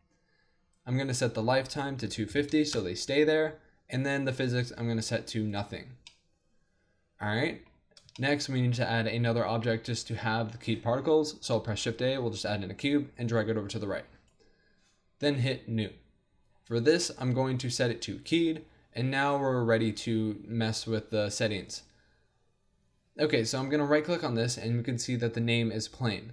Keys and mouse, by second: 0.3 middle click, 1.1-2.8 drag, 3.0-5.5 middle drag, 6.0-7.8 drag, 11.6 shift+a, 13.2-14.9 drag, 16.5-23.4 middle drag, 23.4-25.9 drag.